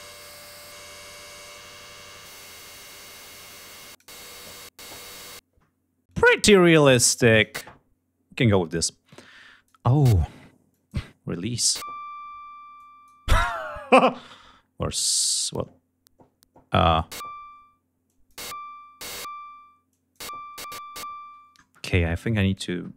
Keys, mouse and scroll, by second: 1.1-2.6 drag, 2.8 click, 5.7 click, 6.6 click, 8.7 click, 10.4 click, 11.1 click, 12.4 click, 14.8 click, 16.4 click, 17.7 click, 19.6 click, 21.9 click.